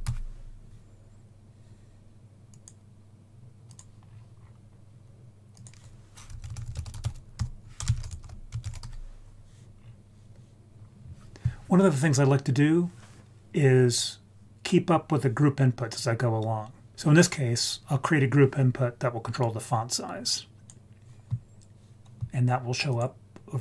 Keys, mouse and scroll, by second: 4.0-4.3 scroll down 2, 4.3-5.5 scroll up 3, 5.5-8.8 drag, 9.7-10.7 scroll down 2, 10.7 scroll down 1, 16.2 scroll down 1, 16.9 ctrl+z, 19.4-20.7 drag, 22.9 click.